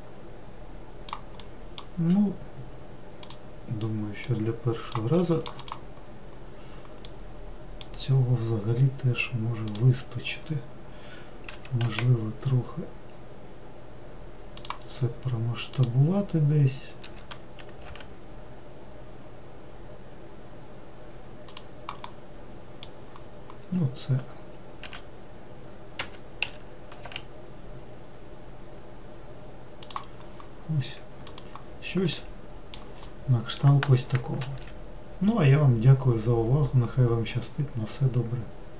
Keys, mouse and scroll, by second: 1.2-3.0 middle drag, 3.0 click, 4.1 click, 5.0-5.4 middle drag, 5.4 click, 6.3-6.9 scroll down 1, 6.9-9.5 middle drag, 9.5 click, 11.3 s, 15.6 click, 16.9 s, 21.8-23.7 middle drag, 23.7-24.7 scroll up 2, 24.7 z, 26.3 s, 30.0-31.1 scroll down 2, 31.1 click, 31.9-34.3 middle drag, 34.3 ctrl+s.